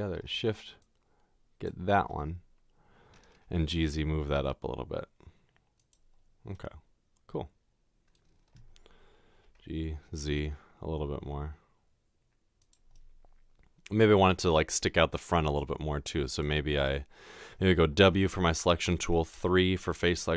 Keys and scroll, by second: 3.6 typing, 9.5-10.0 typing, 18.1 w, 19.3 w.